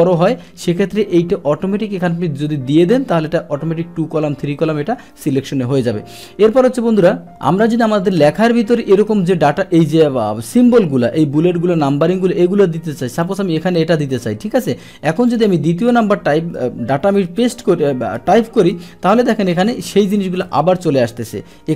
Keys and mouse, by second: 7.6 click, 13.2 click, 14.6 click, 15.3 click, 15.5 click, 16.4 Return, 17.7 BackSpace, 18.2 BackSpace, 18.8 Return.